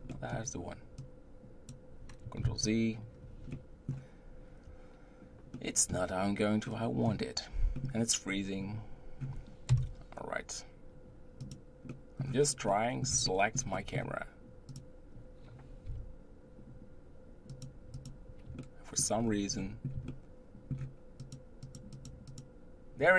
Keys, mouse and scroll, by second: 0.1-1.0 middle drag, 1.0 click, 8.2-9.7 middle drag, 9.7 KP_0, 11.5 click, 11.9-14.7 middle drag, 14.7-15.1 drag, 15.8 t, 17.5 click, 18.6-19.2 shift+middle drag, 19.2 scroll up 4, 19.6-21.2 middle drag, 21.6 click, 21.9 click, 22.3 click.